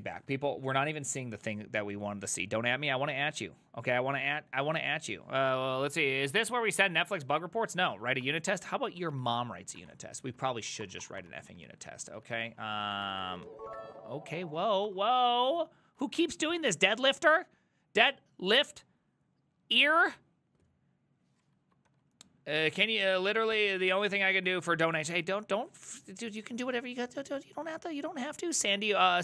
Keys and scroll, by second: 8.0 alt+{, 8.3 Up, 8.5 Return, 8.9 ctrl+a, 9.1-15.1 typing, 9.4 ctrl+c, 9.5 ctrl+c, 10.5 ctrl+c, 16.1 alt++, 21.9 alt+f.